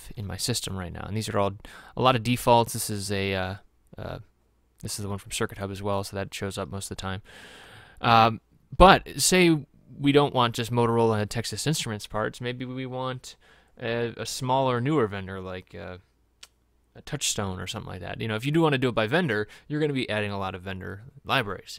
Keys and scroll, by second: 0.2 scroll down 1, 0.7 scroll down 1.